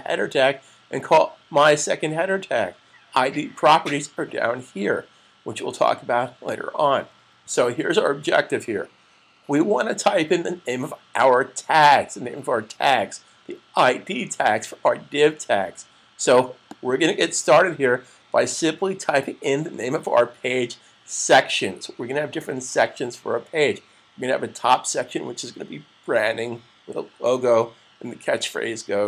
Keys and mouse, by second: 6.4 click, 7.3 super+s, 16.5 click.